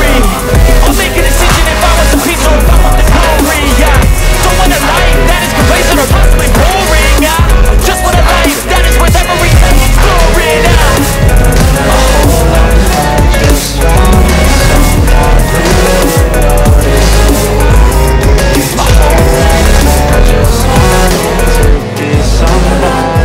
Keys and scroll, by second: 1.4 shift+Page_Up, 4.3 F3, 9.2 ctrl+z, 9.5 F3, 9.7 Escape, 12.0 F2, 13.4 Escape, 14.4 F3, 18.5 F2.